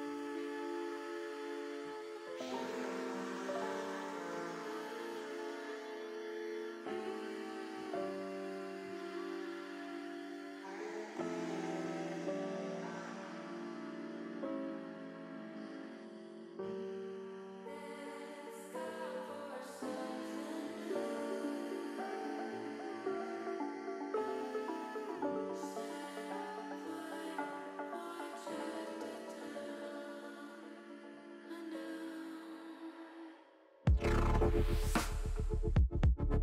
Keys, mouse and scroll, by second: 0.0-1.6 middle drag, 2.5 middle click, 2.6 middle click, 3.5 middle click, 6.2 Tab, 6.7 middle click, 9.1 Tab, 9.1 click, 9.7 l, 10.3 click, 10.9 middle click, 13.6 middle click, 14.4 click, 19.6-20.7 drag, 27.6-31.7 drag, 33.4 click, 35.5-36.4 drag.